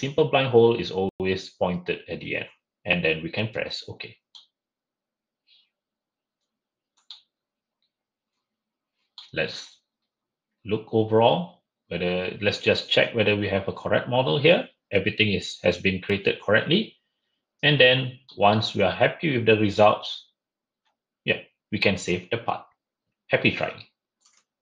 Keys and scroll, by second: 24.2 shift+Escape.